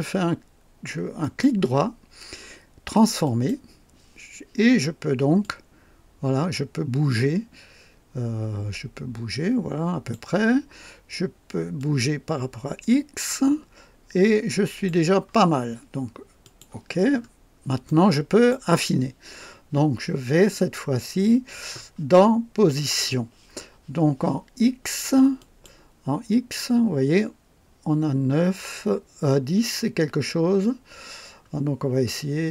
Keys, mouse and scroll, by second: 1.2 right click, 3.2 click, 5.4-10.3 drag, 11.8-15.0 drag, 16.4 click, 17.1-17.4 scroll up 1, 17.8-18.7 right drag, 25.4 click, 26.1 scroll down 1, 26.6 scroll up 1, 27.2 scroll up 1, 29.4 scroll down 2, 30.3 scroll down 2.